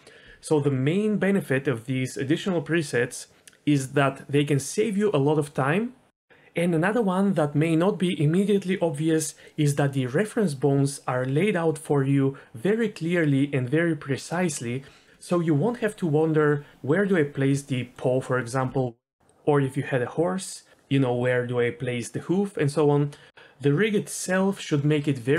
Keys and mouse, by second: 7.5 Tab, 7.7 a, 7.8 x, 8.1 middle click, 8.6-9.3 drag, 9.5 middle click, 9.6 shift+middle drag, 9.9 shift+middle click, 11.0-13.6 drag, 14.0 middle drag, 14.6 middle click, 14.9 shift+middle click, 20.3 shift+middle click, 21.3 middle click.